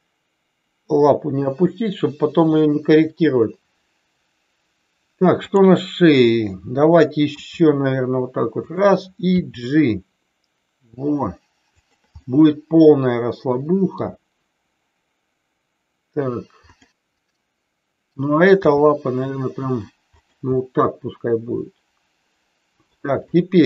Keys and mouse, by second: 5.4 click, 7.4 r, 8.6 click, 9.2 g, 12.2-13.9 middle drag, 16.7 click, 18.5 g, 20.1 click, 20.5-22.9 middle drag.